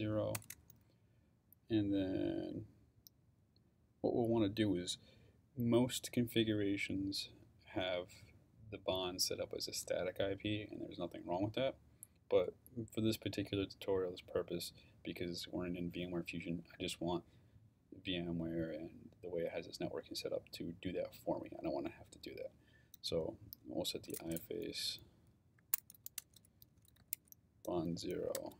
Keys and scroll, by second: 0.0-0.2 typing, 0.3 Return, 23.8-28.5 typing.